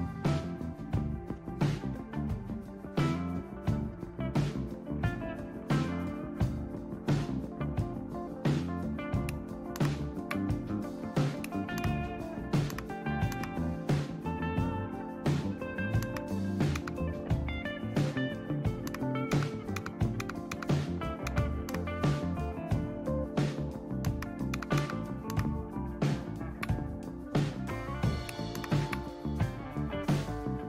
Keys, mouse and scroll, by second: 1.7-2.5 scroll down 1, 2.5-3.4 scroll down 1, 3.4-3.9 scroll down 1, 3.9-5.1 scroll down 1, 5.1-6.1 scroll down 1, 6.1-8.2 scroll down 1, 9.8 super+Right, 11.8 super+Right, 12.7 super+Right, 13.3 super+Right, 16.0 super+Right, 16.7 super+Left, 18.9 super+Right, 19.3 super+Left, 20.2-21.3 super+Left, 21.7 super+Right, 24.1 super+Right, 24.5 super+Left, 24.8 super+Left, 25.3 super+Right, 28.6 super+Right.